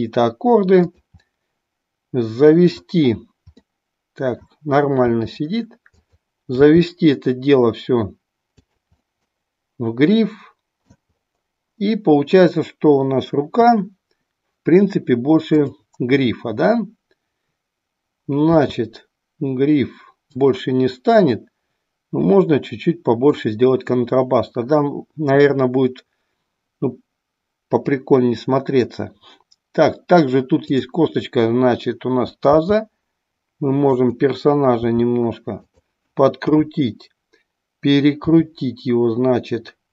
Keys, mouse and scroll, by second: 1.4-2.9 middle drag, 3.6-4.6 middle drag, 5.3 r, 6.1 click, 6.7 g, 8.6 click, 9.1-11.0 middle drag, 15.5 click, 18.5 s, 20.4 click, 30.5-31.4 drag, 32.4 g, 35.0 r, 38.2 r.